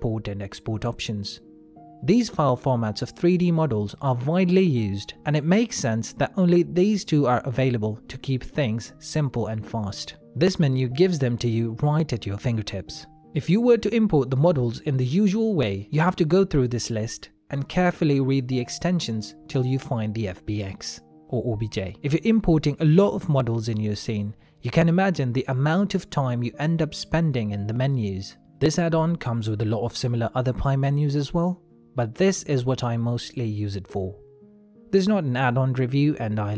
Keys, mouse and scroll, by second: 7.3 middle click, 7.8 g, 9.6 x, 10.6 middle click, 12.4 ctrl+s, 17.9 click, 24.3 shift+middle click, 24.9 middle click, 33.1 middle click, 36.1 ctrl+middle click.